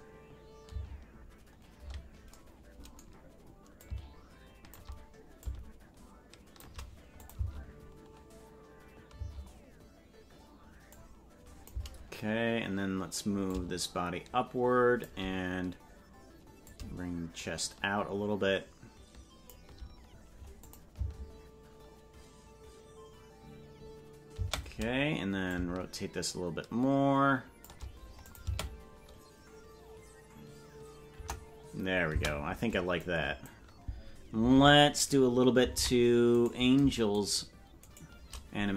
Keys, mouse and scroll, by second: 0.8 space, 3.7-4.8 drag, 5.4-6.6 drag, 7.2 click, 7.4 space, 9.2 space, 10.9 click, 13.4-15.1 drag, 16.6-19.5 drag, 20.7 click, 20.9 space, 24.4 space, 25.4-27.7 shift+drag, 28.3 click, 28.4 space, 31.2 KP_0, 32.2 space, 33.0 click, 34.5 ctrl+Tab, 35.0 right click, 35.8 ctrl+Tab, 36.4 right click.